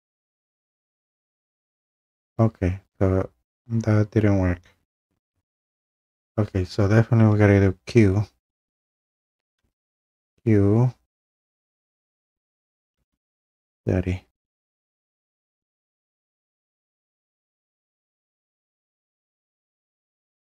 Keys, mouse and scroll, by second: 1.3 click, 2.8 scroll, 9.6 q, 12.9-14.1 typing, 15.0-16.2 click, 16.2-20.0 drag.